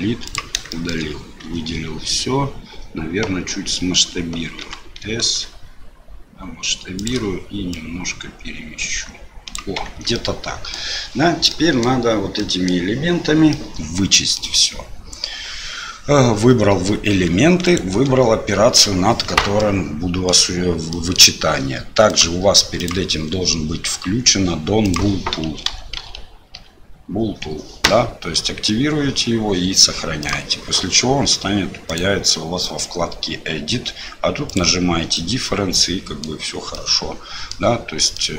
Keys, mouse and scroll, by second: 0.6 shift+click, 1.4 a, 4.6 s, 7.8-9.5 drag, 9.8 Tab, 10.1 middle click, 11.4 middle click, 12.3 middle click, 13.5 middle click, 17.7 shift+click, 19.5 middle click, 20.9 middle click, 22.0 click, 31.9 click, 34.5 click, 35.1-36.2 middle drag, 36.7 middle click, 38.1 middle click.